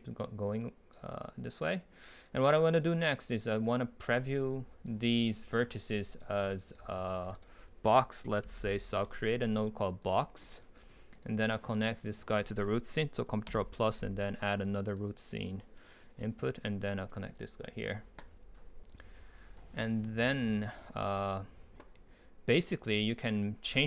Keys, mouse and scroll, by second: 3.3-6.0 drag, 6.0 right click, 6.3-9.5 drag, 10.1 click, 12.0 right click, 14.9-15.8 drag, 15.8-16.5 right drag, 16.5-21.6 drag.